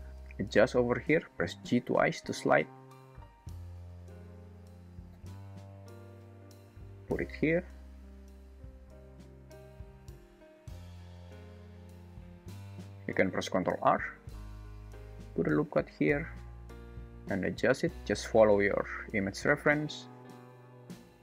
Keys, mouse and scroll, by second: 0.5 g, 8.3 g, 11.3 g, 13.6 ctrl+r, 17.3 g, 20.3 g.